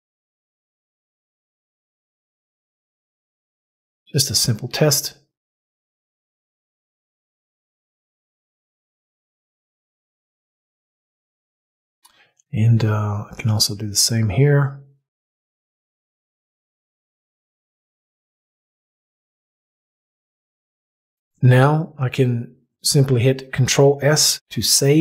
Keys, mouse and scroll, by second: 13.3 click, 24.2 ctrl+s.